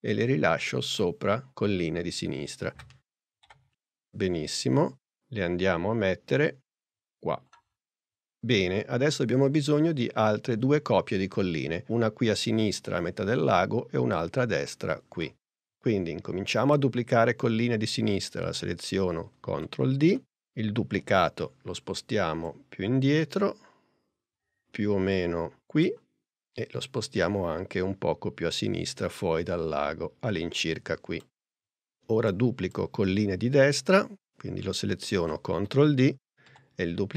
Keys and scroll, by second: 3.4 p, 19.5 super+d, 21.1 p, 35.2 super+d, 36.5 super+p.